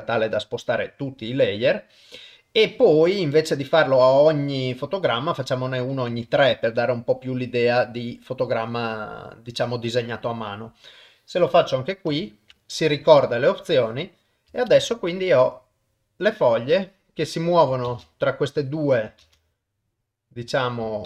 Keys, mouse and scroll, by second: 4.9-6.2 drag, 10.6 click, 12.2 ctrl+shift+e, 13.7 click, 14.7 shift+space, 17.9 shift+space, 18.6 click, 19.2 shift+space.